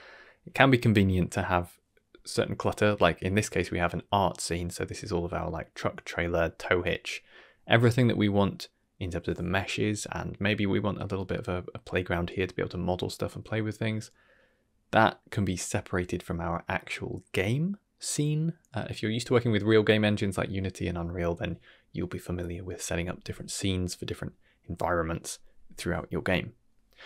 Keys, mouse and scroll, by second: 26.1 ctrl+space.